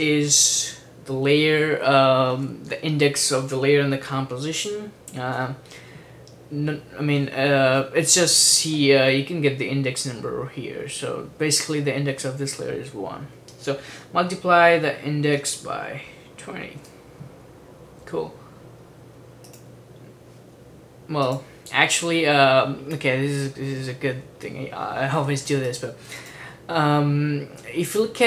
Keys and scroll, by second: 0.0-0.3 typing, 1.3 x, 15.4 typing, 16.5-17.4 typing.